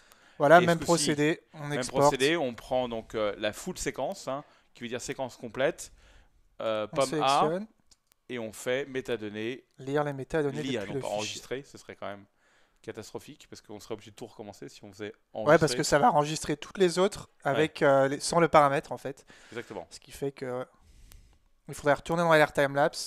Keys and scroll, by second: 6.8 super+a.